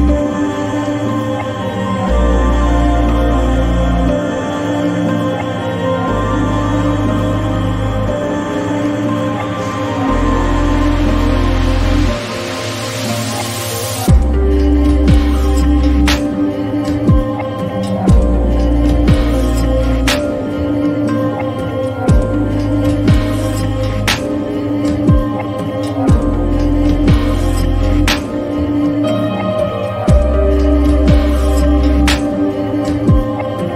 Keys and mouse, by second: 1.5 Delete, 3.5 Tab, 5.2 click, 6.8 click, 9.5 ctrl+z, 12.3 click, 15.4 Tab, 16.5 click, 17.3 click, 18.6 Delete, 20.2 Tab, 21.2 click, 22.1 click, 30.8 click, 32.5 click, 33.1 click.